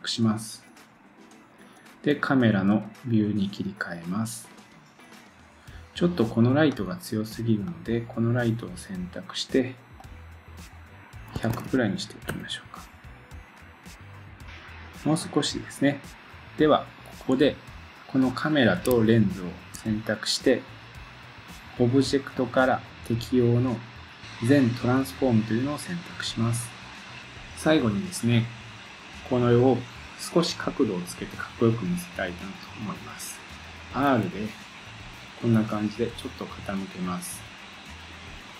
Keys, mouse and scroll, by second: 0.0-6.7 drag, 3.3-5.4 scroll down 1, 5.4-6.7 scroll down 5, 6.8 click, 7.8-18.5 drag, 11.6 0, 19.1 shift+click, 21.3-21.7 drag, 21.7-38.5 drag.